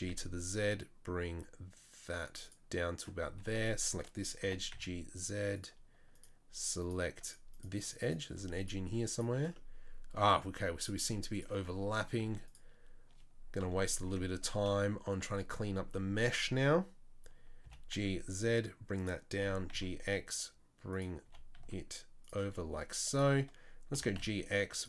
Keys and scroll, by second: 3.4 2, 4.4 g, 8.3 z, 12.2 z, 13.6 KP_3, 13.9 KP_1, 17.6 g, 19.4 g, 21.2 g, 23.9 g.